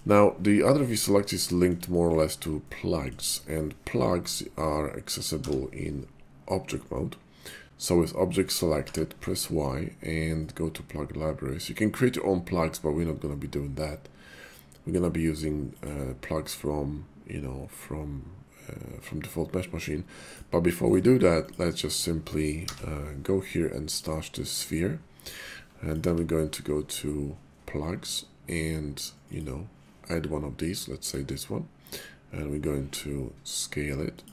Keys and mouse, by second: 1.4 shift+click, 2.5 shift+middle click, 5.3 y, 8.7 y, 21.0 right click, 21.3 click, 22.5 y, 26.1 y, 32.9 s, 34.1 click.